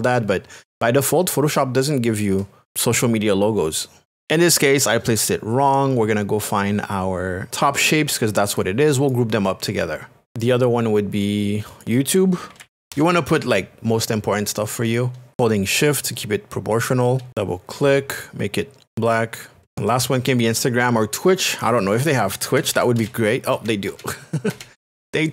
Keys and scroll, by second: 0.6 shift+space, 12.3-13.9 typing, 16.1 shift+space, 22.1-23.5 typing.